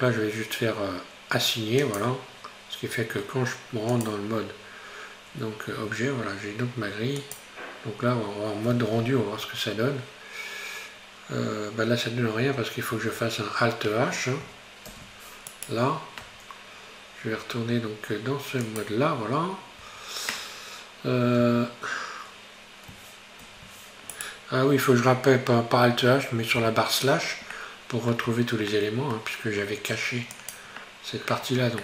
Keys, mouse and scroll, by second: 1.8-3.2 drag, 3.2 scroll down 5, 4.7 click, 6.0 Tab, 7.3 click, 11.3-12.0 scroll down 2, 12.5 Tab, 12.9 Tab, 14.9 alt+h, 15.5 right click, 16.2 Tab, 17.4 Tab, 18.7 click, 19.3-19.8 scroll down 2, 19.8 Tab, 21.4 a, 23.4 alt+h, 24.2 right click, 26.1-26.6 scroll up 1, 26.6 KP_Divide, 27.6 middle click, 28.3 Tab, 28.8-30.4 middle drag, 30.4 click.